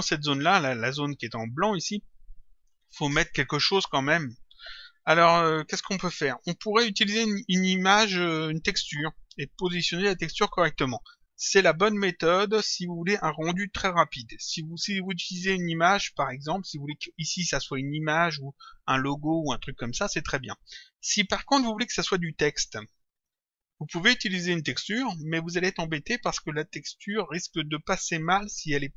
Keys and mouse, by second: 0.7 click.